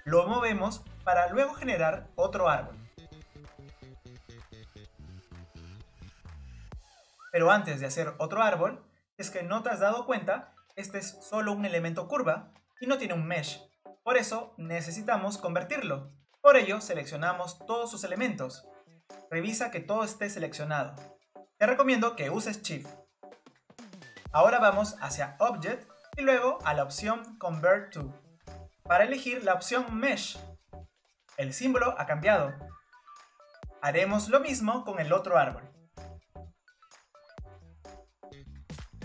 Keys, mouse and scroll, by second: 0.0-1.6 middle drag, 1.6 click, 4.0 click, 4.6-5.8 scroll down 1, 5.8-10.1 middle drag, 10.5-12.6 scroll up 2, 12.6 scroll down 1, 13.5 scroll down 1, 13.8-15.5 middle drag, 15.5 click, 16.2 click, 24.4 shift+click, 27.7-30.8 drag, 33.7 click, 34.1-34.5 scroll up 1, 34.7 scroll up 1, 34.8-36.1 middle drag, 36.1 click, 36.6 shift+click, 37.6-38.6 drag, 38.8-39.0 middle drag.